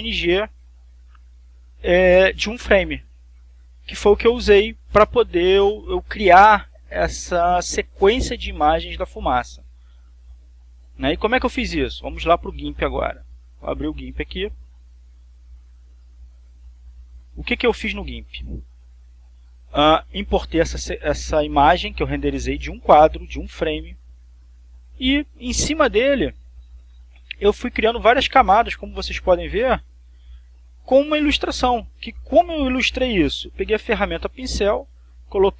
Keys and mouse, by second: 5.1 click, 7.6-12.5 drag, 13.7 click, 15.5 click, 16.0-17.3 drag, 18.4 click, 22.2 click, 26.9 click, 29.5-31.2 drag, 31.5 click.